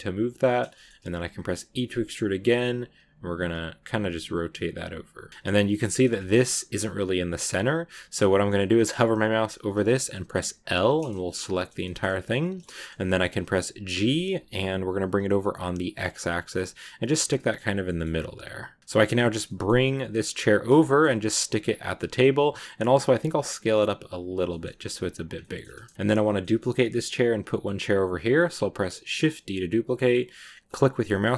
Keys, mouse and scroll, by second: 0.6 shift+middle click, 1.5 e, 5.2 scroll down 4, 5.3 middle click, 5.3 scroll up 2, 5.5 a, 5.6 middle click, 5.8 a, 6.0 shift+middle click, 6.2 scroll up 1, 6.3 a, 8.2-10.5 middle drag, 10.5 l, 10.8-11.9 middle drag, 11.9-12.3 scroll up 1, 12.3-13.9 middle drag, 13.9 g, 17.2 scroll down 1, 17.3 middle click, 17.7 g, 18.8 middle click, 18.9 g, 20.7 shift+middle click, 21.1 g, 21.8-22.2 scroll down 2, 21.8 middle click, 22.2 middle click, 22.8 s, 25.3-28.9 middle drag, 28.9 shift+d.